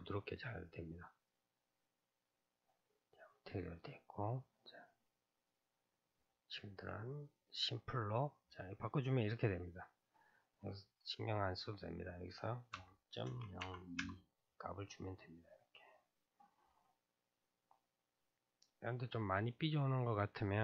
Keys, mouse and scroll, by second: 1.3-2.3 drag, 2.3 scroll down 3, 3.6 scroll down 4, 4.4 scroll down 2, 5.5-6.0 drag, 6.0 scroll down 4, 7.1 click, 11.5-14.5 drag, 14.9-17.7 middle drag, 17.7-19.6 scroll up 1, 19.6-20.6 scroll up 1.